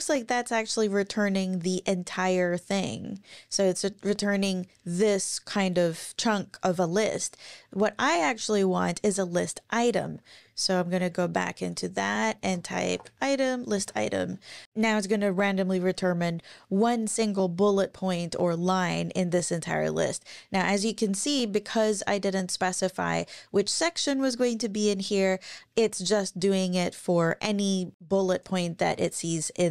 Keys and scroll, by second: 10.4 Page_Down, 11.2 Home, 12.0-13.4 typing, 13.7 Page_Up.